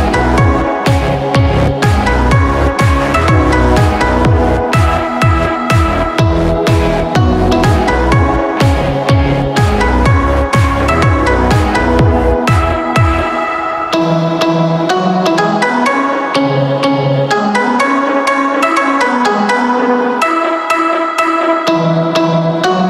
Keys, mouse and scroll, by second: 19.9 click.